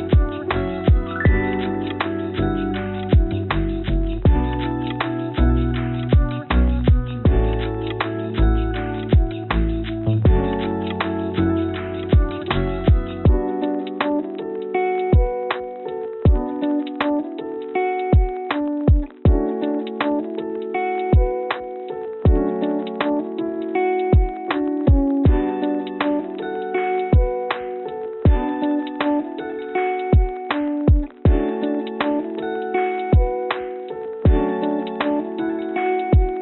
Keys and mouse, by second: 6.9 click, 7.6 click, 8.5-9.7 drag, 10.3 click, 17.1 click, 17.7-18.8 drag, 19.3 click, 32.6-34.0 drag, 35.1 click, 36.3-36.4 drag.